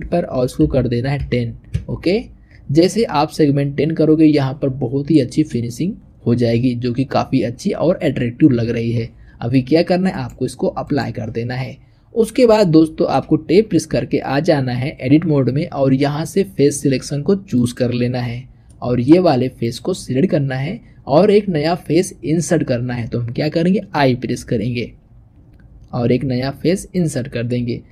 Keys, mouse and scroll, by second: 5.0-8.0 middle drag, 9.9-11.6 drag, 11.6-12.4 scroll down 1, 12.4-13.7 shift+middle drag, 13.7 Tab, 17.4 click, 18.5 middle click, 19.5 click, 27.3-27.9 middle drag.